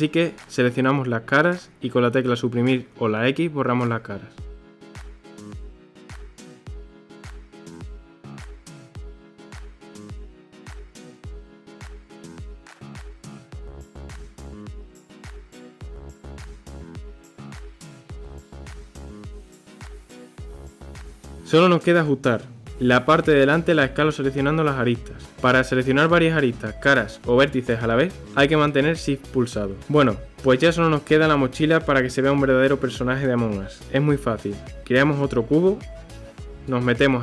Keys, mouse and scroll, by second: 1.1 click, 3.1 Delete, 5.6 click, 5.9 Delete, 6.3 KP_3, 6.5 click, 6.7 Delete, 7.2 click, 7.4 click, 7.6 ctrl+KP_3, 7.8 click, 8.1 Delete, 8.7 middle click, 9.3 click, 9.5 x, 9.9 x, 10.2 middle click, 11.1 Tab, 11.3 click, 11.7 KP_3, 12.0 g, 13.5 g, 15.0 r, 15.4 g, 16.0 middle drag, 16.7 middle click, 16.9 Tab, 17.5 click, 18.1 middle click, 18.4 alt+shift+click, 18.8 KP_3, 19.3 click, 20.1 scroll, 20.2 middle click, 20.9 click, 21.1 alt+shift+click, 21.7 alt+shift+click, 22.9 alt+shift+click, 24.3 alt+shift+click, 25.5 alt+shift+click, 26.5 KP_1, 27.9 s, 32.0-33.8 middle drag, 34.1 shift+a.